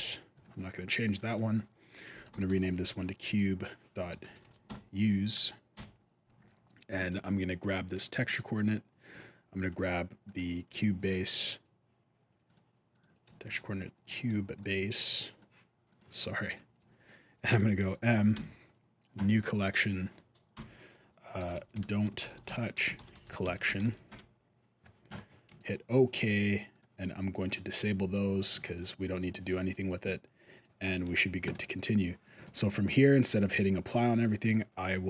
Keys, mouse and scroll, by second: 0.9 click, 1.1 click, 6.5 middle click, 6.9 alt+a, 8.0 right click, 10.0 shift+click, 10.8 middle click, 12.2 click, 12.7 click, 13.2 ctrl+click, 14.4 click, 15.7 click, 16.2 shift+click, 16.8 middle click, 18.1 m, 23.0 l, 25.4 shift+middle click, 26.5 click, 27.8 click, 28.3 shift+middle click, 29.5 middle click, 30.4 middle click, 30.8 alt+a, 31.3 right click, 31.8 middle click, 32.2 shift+middle click, 32.2 shift+scroll up 1, 34.0 middle click.